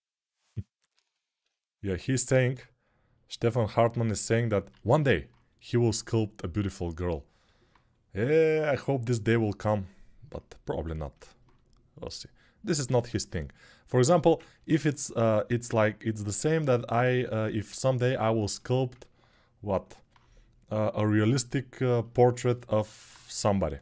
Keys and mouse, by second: 0.5 alt+q, 4.5 alt+q, 23.3 g.